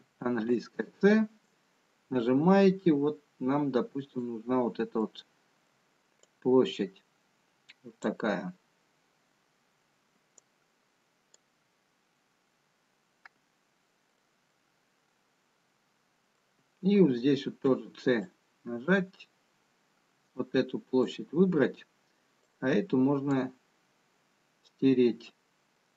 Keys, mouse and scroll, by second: 14.9 middle click, 18.6 c, 25.8 middle click.